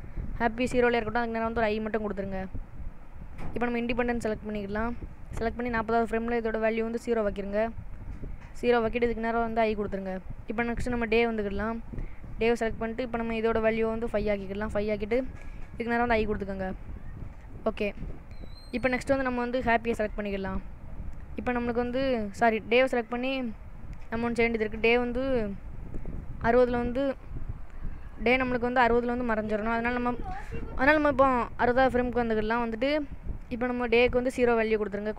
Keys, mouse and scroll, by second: 2.8 i, 3.8 click, 7.2 click, 9.7 i, 11.0 click, 13.5 click, 16.1 i, 19.8 click, 23.4 click, 30.2 click, 33.8 click.